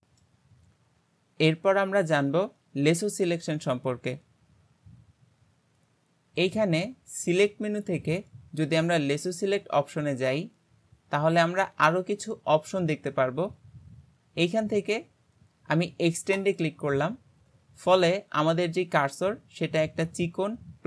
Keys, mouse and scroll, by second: 0.0-2.3 middle drag, 6.4-9.5 drag.